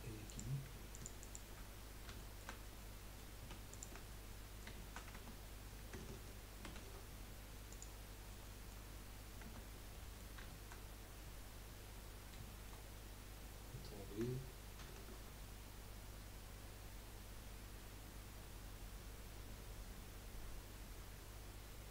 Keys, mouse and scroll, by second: 0.2 click, 0.9 alt+shift+click, 1.2 alt+shift+click, 2.1-3.7 shift+middle drag, 3.7 alt+shift+click, 4.1-5.1 middle drag, 5.1 Tab, 8.4-9.1 middle drag, 9.1-9.4 scroll down 2, 9.4 Tab, 9.9 middle click, 10.9-11.9 scroll up 1, 11.9 middle click, 12.9-14.1 scroll up 1, 14.1-14.8 scroll up 1, 14.8 ctrl+b, 17.5-21.9 drag, 17.5-21.9 middle drag, 17.5-21.9 right drag.